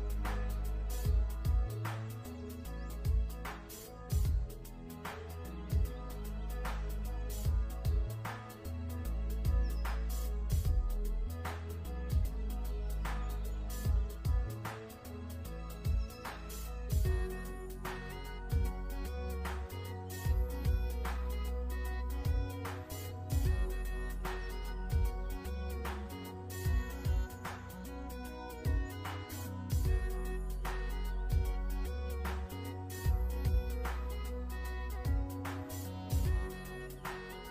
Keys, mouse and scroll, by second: 1.0 click, 2.0 alt+shift+click, 2.7 click, 3.0 alt+shift+scroll down 2, 3.3-4.8 scroll up 3, 4.8 ctrl+z, 6.2 click, 7.7 alt+shift+scroll down 1, 9.4 ctrl+scroll up 1, 10.2-11.1 scroll up 1, 11.1 click, 13.4 click, 14.3 alt+shift+scroll down 2, 15.5 alt+shift+scroll up 1, 16.2 click, 16.6 ctrl+z, 16.8-17.2 typing, 18.1 ctrl+z, 18.4 typing, 19.1 ctrl+z, 19.9 shift+click, 22.1 i, 22.6 shift+click, 23.6 shift+click, 26.8 v, 27.8 click, 29.1-29.8 alt+shift+scroll down 3.